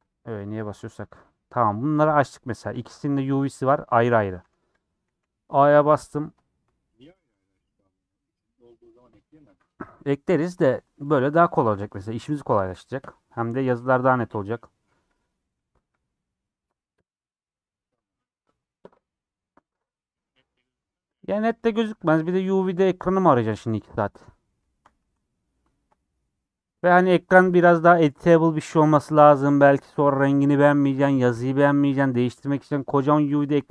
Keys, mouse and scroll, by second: 0.0 click, 0.6 Tab, 1.9 click, 2.6 a, 3.0 Tab, 3.2 a, 4.4 Tab, 4.8 click, 5.1 a, 8.2 click, 23.4-25.0 middle drag, 25.0 a, 25.2-33.7 middle drag.